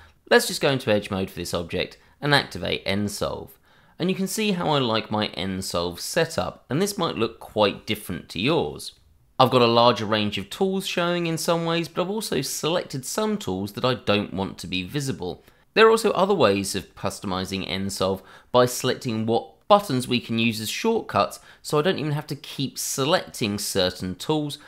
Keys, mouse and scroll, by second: 1.6 click.